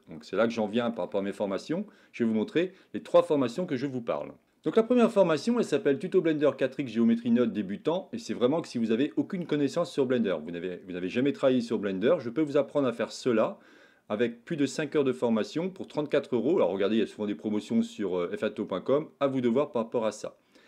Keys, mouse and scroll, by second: 0.2-1.0 shift+middle drag.